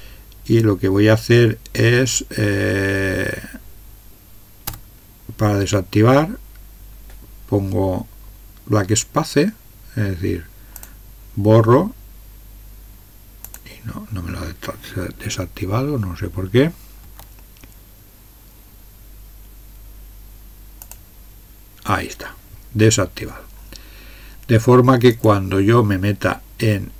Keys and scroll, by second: 4.7 BackSpace, 17.0 BackSpace.